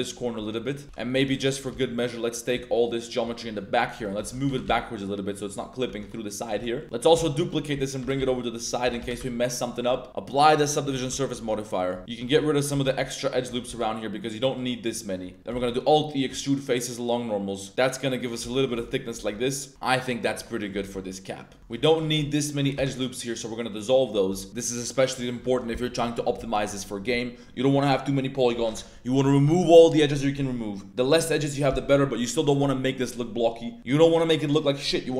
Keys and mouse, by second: 0.4 click, 0.8-4.6 typing, 0.9 click, 1.4 click, 3.0 middle click, 4.2 click, 5.5 click, 5.8 Tab, 6.0-6.4 drag, 6.7 a, 6.8 click, 7.0 Tab, 7.1 shift+d, 7.7 click, 8.2 x, 8.8 g, 9.0 y, 9.7 drag, 10.6 click, 11.0 ctrl+a, 11.1 Tab, 11.3 Tab, 11.6 click, 12.0 alt+shift+2, 12.0 alt+shift+click, 12.3 z, 12.7 z, 13.2 alt+shift+right click, 14.0 x, 15.4 alt+e, 15.6 alt+e, 18.2 shift+click, 18.5 middle drag, 18.5 z, 18.8 Tab, 18.9 click, 19.3 Tab, 19.4 click, 20.2 Tab, 20.4 drag, 20.9 Tab, 21.1-21.4 drag, 21.6 2, 21.8 alt+shift+click, 22.5 alt+shift+click, 22.7 x, 24.1 1, 24.6-24.9 drag, 25.2 click, 25.6 Tab, 25.6-26.1 drag, 26.4 Tab.